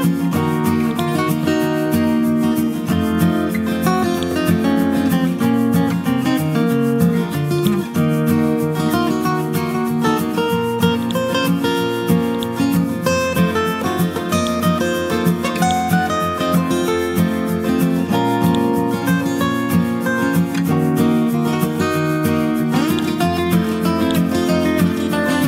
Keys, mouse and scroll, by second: 0.9-3.0 drag, 7.0 click, 8.9-11.0 scroll down 1, 11.0 click, 11.6-12.1 scroll up 1, 12.3 click, 12.9 ctrl+z, 13.7-14.3 scroll up 1, 14.3-17.2 drag, 18.4 shift+click, 22.9 click, 23.3-23.7 scroll up 1, 24.0 click, 25.0-25.4 scroll up 1.